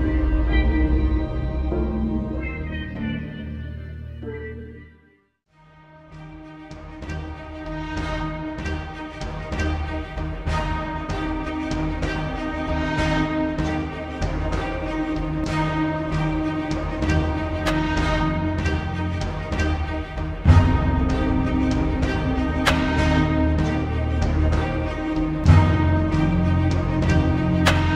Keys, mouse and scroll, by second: 0.2 click, 6.6-7.2 drag, 11.7 click, 12.1 space, 12.3 click, 13.2 b, 14.3-15.3 drag, 17.2-20.0 drag, 21.9 right click, 23.1 click, 24.1-24.5 alt+scroll down 1, 24.8 alt+scroll down 1, 25.8-27.0 drag.